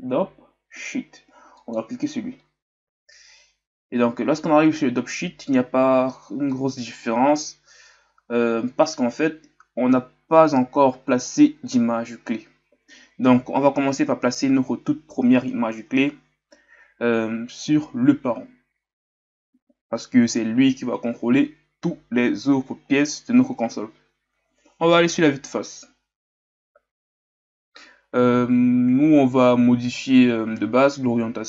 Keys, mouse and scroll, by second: 11.4-15.6 scroll down 1, 15.6-24.9 scroll down 1, 24.9 KP_1.